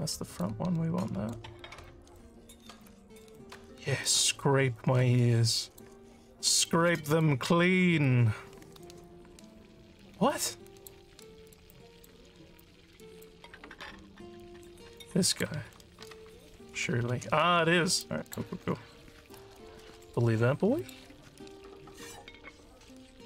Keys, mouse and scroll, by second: 0.4 alt+click, 1.9 alt+click, 2.9 click, 4.5-5.9 alt+drag, 6.7 click, 10.3 alt+click, 11.2 alt+middle click, 11.7 alt+click, 12.7 click, 15.0 click, 18.1 alt+click, 20.8 click.